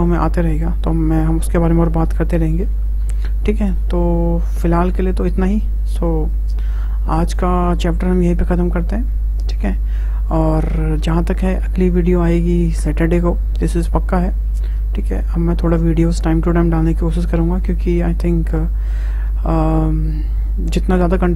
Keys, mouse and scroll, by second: 2.9 scroll down 3, 3.7 scroll up 2, 4.5-5.9 middle drag, 5.9 `.